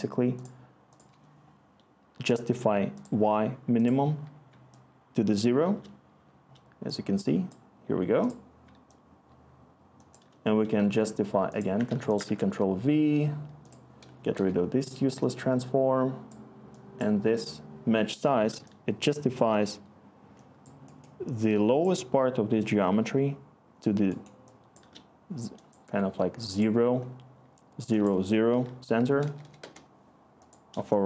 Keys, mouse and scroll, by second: 11.8 ctrl+c, 12.2 ctrl+v, 14.3 Delete, 19.1-20.5 scroll, 28.9 0, 29.6 Return.